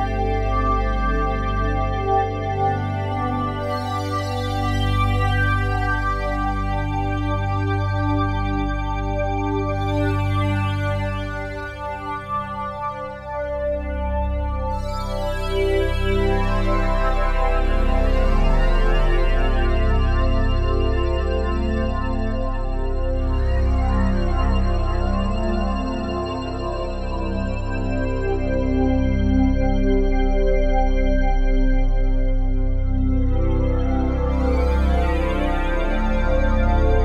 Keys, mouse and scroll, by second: 2.3 Left, 2.3-2.9 drag, 2.6-3.4 typing, 9.4 i, 10.1 click, 15.3 Left, 15.4 Left, 15.6 Left, 15.8 Left, 17.8 i, 18.4 click, 20.6 s, 22.2 click, 23.9 click, 26.2 click, 26.9 i, 28.3 click, 28.6 space, 29.9-30.5 typing, 30.1 click, 31.6 space, 32.0-32.4 drag, 33.0 g, 33.3 2, 33.5 click, 36.6 click, 36.6 typing.